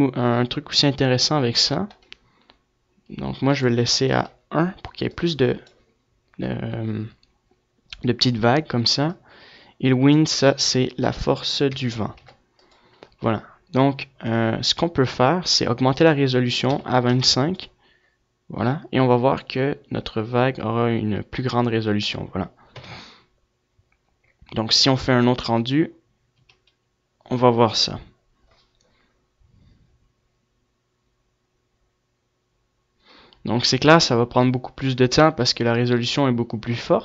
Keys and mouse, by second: 1.4 click, 21.1 KP_0.